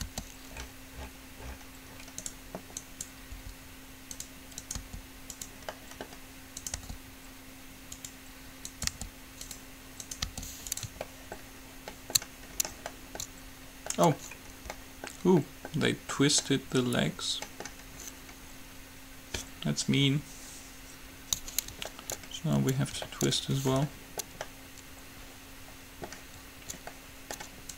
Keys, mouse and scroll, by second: 0.4 g, 3.0-7.0 right drag, 3.5 g, 5.0 g, 5.9-7.0 drag, 7.0 g, 9.0 g, 9.1-11.3 right drag, 10.5 g, 11.3-16.6 middle drag, 27.6 middle click.